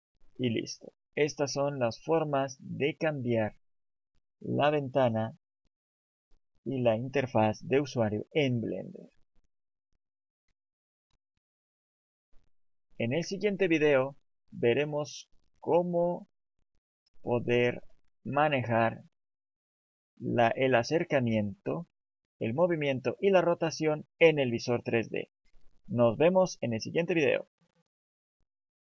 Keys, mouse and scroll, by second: 0.3-0.8 scroll up 4, 1.1 shift+middle click, 2.0 scroll down 1, 3.5-4.0 scroll down 1, 4.5 middle click, 9.9 click, 15.4 click, 18.9 shift+middle click.